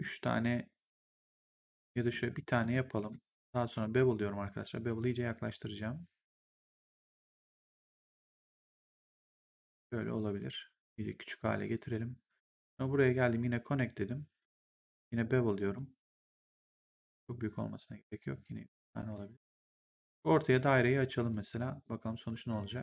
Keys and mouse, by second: 2.0 middle click, 2.9 w, 3.7 click, 4.9 click, 7.2 click, 10.3 click, 12.3 click, 14.4 w, 15.6 click, 16.8 click, 18.4 click, 21.1 click, 22.5 right click.